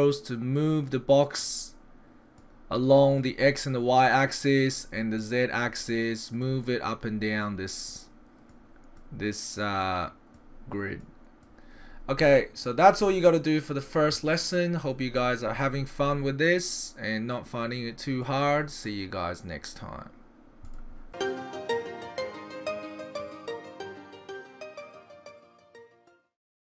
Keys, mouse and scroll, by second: 2.4 click, 4.1 click, 5.2 click, 7.5 click, 8.5 click, 9.9 click, 11.0 click, 12.3 middle click, 13.1 middle click, 15.2 middle click.